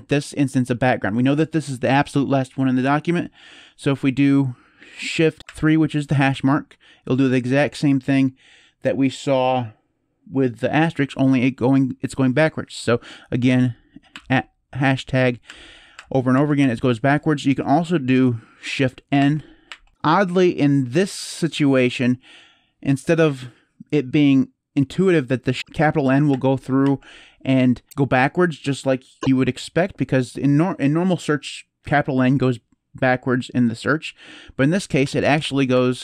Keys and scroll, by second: 5.4 #, 13.3 #, 13.9 #, 15.2 #, 15.7 #, 16.1 #, 16.4 #, 17.4 typing, 18.9 shift+n, 19.4 shift+n, 25.6 shift+n, 26.1 shift+n, 26.6 shift+n, 34.8 n, 35.2 n, 35.5 n.